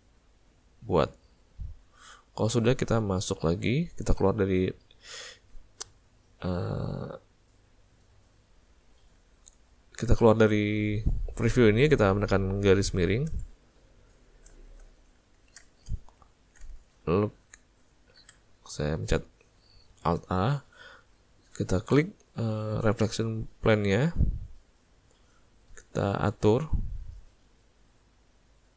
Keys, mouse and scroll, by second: 5.7 middle click, 9.4 ctrl+middle click, 10.7 middle click, 13.4 /, 14.1 middle click, 14.6 shift+middle click, 14.9 middle click, 15.4 ctrl+middle click, 15.9 shift+middle click, 16.3 ctrl+middle click, 16.4 ctrl+middle click, 16.8 shift+middle click, 18.3 alt+a, 24.9 click, 27.8 middle click.